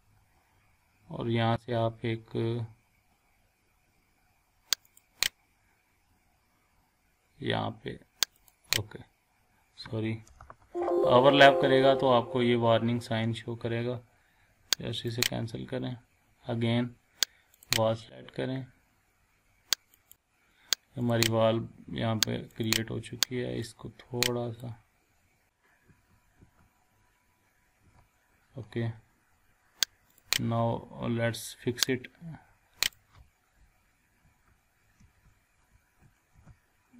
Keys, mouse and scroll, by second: 5.0 click, 8.4 click, 9.4 scroll down 1, 10.6 ctrl+z, 15.1 click, 17.6 click, 19.9 click, 20.1 scroll down 1, 21.0 click, 21.8 scroll up 1, 22.5-24.9 drag, 28.7 scroll down 1, 30.1 click, 30.5 scroll up 1, 31.9-33.1 drag, 34.3 Left, 35.0 Up, 35.7 Left, 36.4 Up.